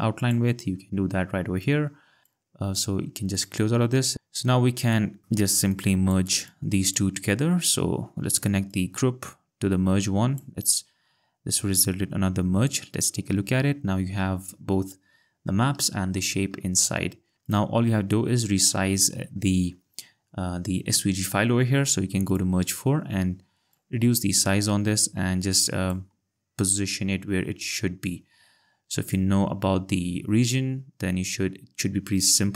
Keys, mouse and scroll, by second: 0.2 click, 2.2 click, 4.1 ctrl+scroll, 8.7 click, 12.7 click, 16.0 ctrl+scroll, 17.5 click, 22.3 click, 23.7 click, 26.5 ctrl+scroll, 29.0 scroll, 29.2 click.